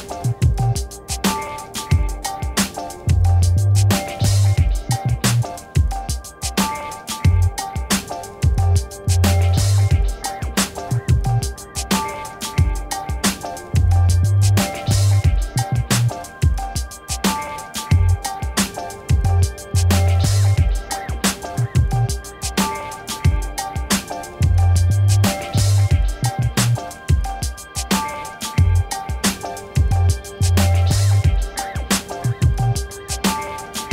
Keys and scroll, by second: 4.6 9, 12.0 1, 12.3 5, 18.9 ctrl+-, 32.1 alt+BackSpace.